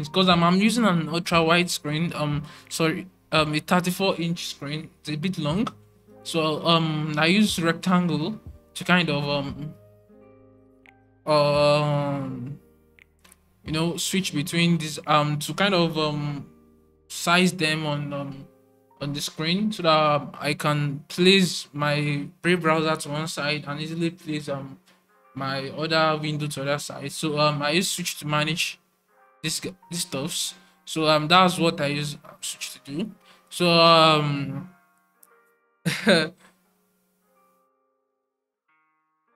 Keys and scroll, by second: 36.1 typing.